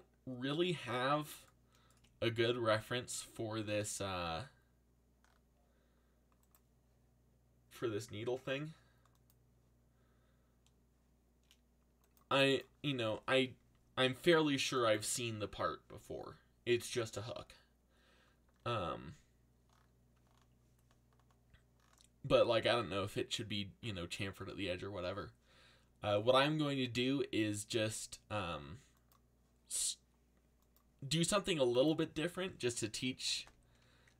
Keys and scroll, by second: 13.0 alt+a, 32.7-33.6 typing.